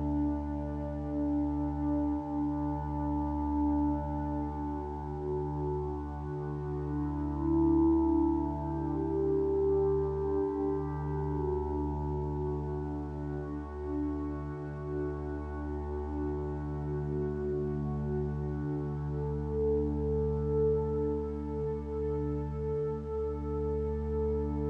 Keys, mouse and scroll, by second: 1.5 ctrl+z.